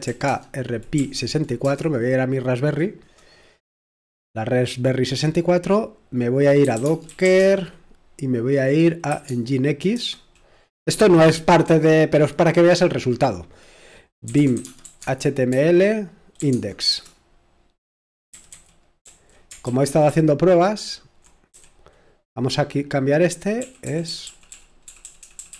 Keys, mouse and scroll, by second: 0.0-1.6 typing, 6.4-7.7 typing, 9.1-9.9 typing, 14.0-16.9 typing, 18.1-22.1 typing, 23.3-24.6 typing.